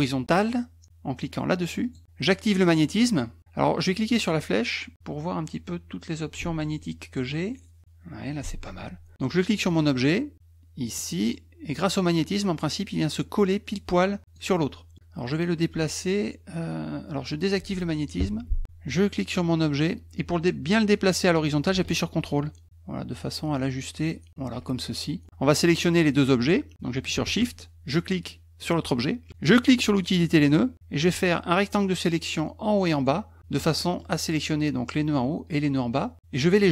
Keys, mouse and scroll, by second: 1.8 click, 4.1 click, 9.7 click, 11.0-14.3 drag, 17.5 click, 19.5-24.3 drag, 28.6 shift+click, 30.0 click, 31.0-33.0 drag, 33.6 middle click, 36.0 middle click.